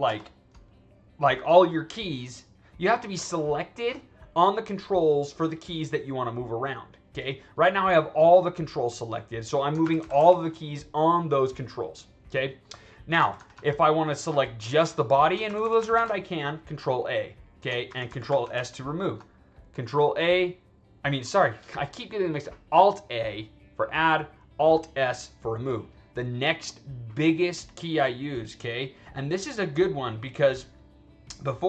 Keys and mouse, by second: 0.0 ctrl+z, 7.9-8.6 drag, 9.7 alt+a, 9.9 alt+a, 10.1 alt+a, 13.1 ctrl+z, 13.3 ctrl+z, 13.5 ctrl+z, 14.2 click, 15.4 alt+a, 15.7 alt+a, 15.9 alt+a, 17.8 alt+s, 18.0 alt+s, 18.2 alt+s, 18.4 alt+s, 29.3 click, 31.4 click.